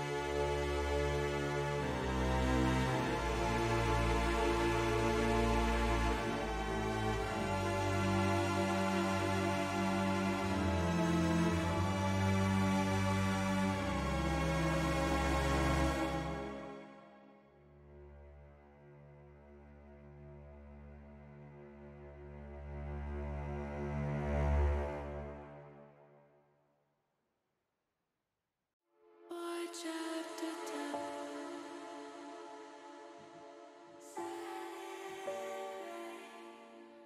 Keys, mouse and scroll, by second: 3.1 s, 5.0 click, 5.6 s, 7.0 click, 7.6 click, 8.5 s, 9.7 click, 10.5 click, 12.0 click, 13.1 ctrl+z, 13.5 ctrl+z, 13.8-14.9 middle drag, 15.6 click, 17.3 KP_1, 18.6 middle click, 19.9 middle click, 21.6 middle click, 22.0 shift+middle click, 22.9 click, 25.9 click, 26.5 click, 27.1-28.7 drag, 29.8 click, 30.2-31.3 drag, 33.0 click, 34.2 click, 35.3 click, 36.4 click.